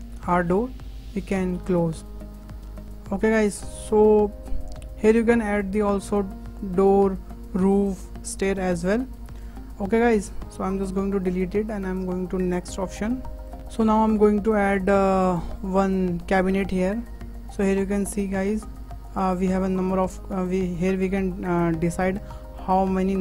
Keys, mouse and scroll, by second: 0.5 click, 2.9 scroll down 1, 3.1-3.4 shift+middle drag, 3.4-3.9 scroll up 2, 3.9-6.9 shift+middle drag, 8.9 scroll up 3, 9.2-9.5 shift+middle drag, 9.5 scroll down 3, 10.4-11.2 scroll down 4, 11.2 click, 12.7 Delete, 12.9 Delete, 13.3 scroll up 4, 13.6-16.3 shift+middle drag, 16.3-17.0 drag, 17.0-17.6 scroll up 5, 17.6-19.1 shift+middle drag, 19.1-23.2 drag.